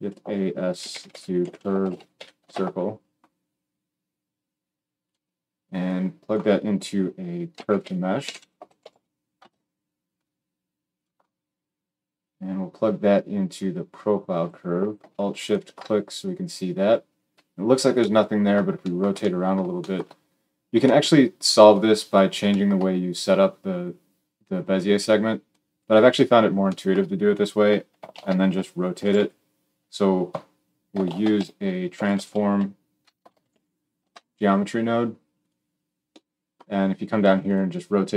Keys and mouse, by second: 5.0 middle click, 5.8-11.0 drag, 11.0-12.1 middle drag, 12.1-15.5 drag, 15.5-21.6 alt+shift+middle drag, 21.6-35.4 drag, 28.0 shift+a, 31.0 shift+a, 33.1 BackSpace, 35.4-37.4 middle drag, 37.4-38.1 drag.